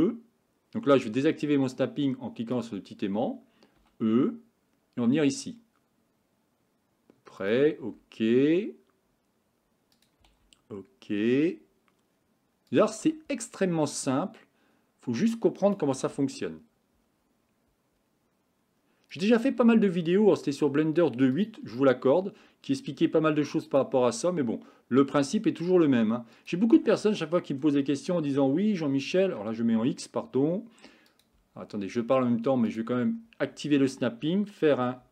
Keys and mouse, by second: 2.6 click, 3.8 e, 7.9 e, 10.3 e, 13.1 e, 16.0 e, 19.5 e, 21.7 e, 24.0 e, 26.8 e, 32.7 click, 35.0 g.